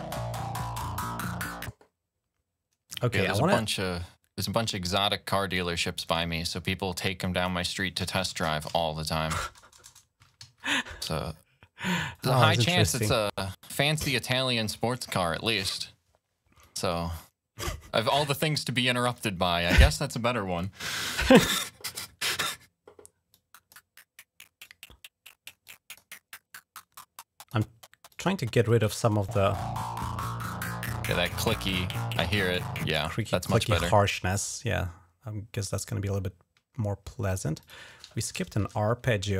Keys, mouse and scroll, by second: 2.7 click, 4.3 click, 5.9 right click, 7.1 click, 7.7-10.8 typing, 11.7 click, 13.6 click, 14.4 click, 16.4-17.4 drag, 18.4 click, 20.4 click, 23.1 click, 24.4 click, 25.5 click, 26.6 click, 27.9 click, 29.0 click, 30.2 click, 31.1 click, 31.4 click, 32.3 click, 32.7 space, 33.0 click, 35.4 click, 36.0 scroll up 2, 37.4 click, 38.4 ctrl+Down.